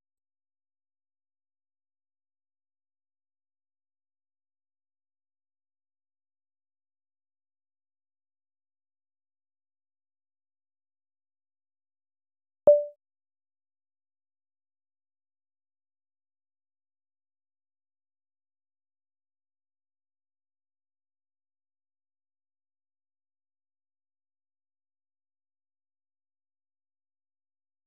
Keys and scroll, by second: 0.0-0.7 typing, 2.5 ctrl+l, 4.9-6.2 typing, 6.4 Escape, 7.0 ctrl+l, 8.6-9.4 typing, 9.4 Return, 10.5-12.6 typing, 18.0 alt+Tab, 19.5-23.0 typing.